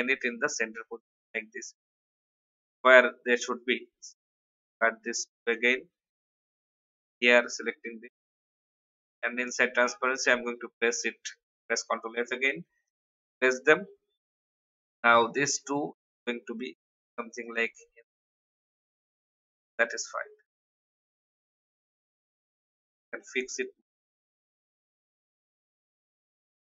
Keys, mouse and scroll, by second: 4.6 shift+click, 5.5 ctrl+x, 6.5 click, 9.4 ctrl+f, 12.8 click, 15.8 shift+Down, 16.4 shift+Down, 17.7 Up, 18.1 Up, 20.6 click, 21.5 alt+scroll up 1, 22.4 click, 26.0 Delete.